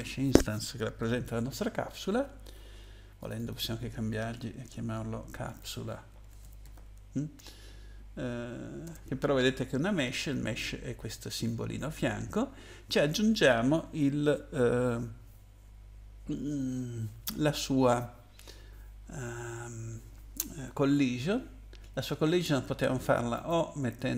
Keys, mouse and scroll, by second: 3.2 click, 3.4 click, 5.3-7.2 typing, 8.8 Return, 23.3 click.